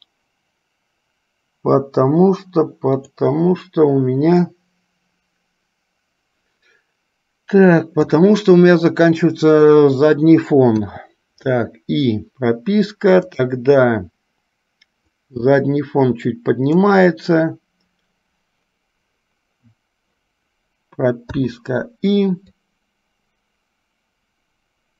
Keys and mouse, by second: 4.5-8.2 drag, 10.9 i, 13.4 click, 15.4-17.0 drag, 21.4 i, 22.8-24.9 drag.